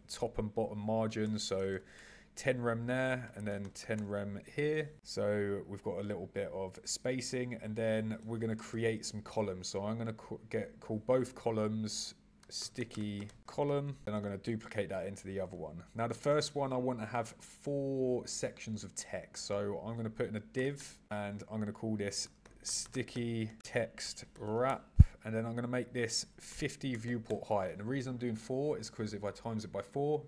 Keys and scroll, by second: 8.1 super+e, 14.0 super+c, 14.2 super+v, 16.3 super+e, 23.6 shift+-.